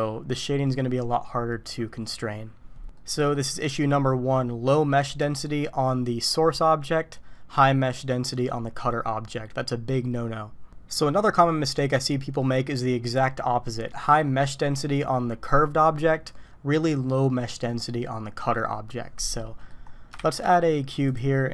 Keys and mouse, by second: 3.0 middle click, 3.7 middle click, 19.6 click, 20.4 shift+a.